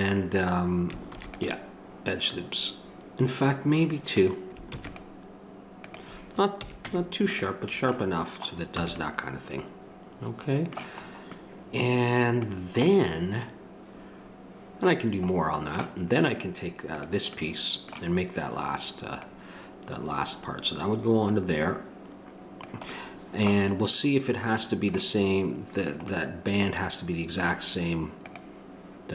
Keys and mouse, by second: 1.1 ctrl+r, 4.7 ctrl+r, 6.6 a, 6.9 Tab, 7.6 middle click, 8.8 a, 16.3-18.5 right drag, 18.5-22.6 drag.